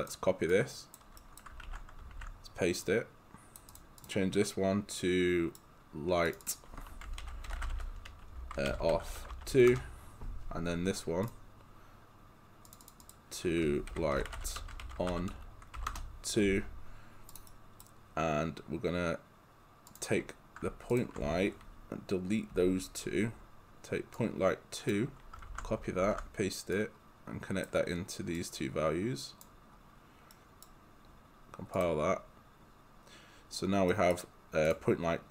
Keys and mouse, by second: 0.5 click, 1.2 right click, 1.7 ctrl+c, 2.2 ctrl+v, 2.9 click, 5.0 right click, 6.3 click, 7.0-9.8 typing, 11.3 click, 13.7-15.8 typing, 15.9 Return, 17.3 click, 17.5 right click, 19.9 click, 20.9 ctrl+click, 22.5 Delete, 24.2 click, 25.5 ctrl+c, 26.0 ctrl+v, 26.8 click, 30.3 right click, 31.8 click, 33.9 right click, 34.7 click.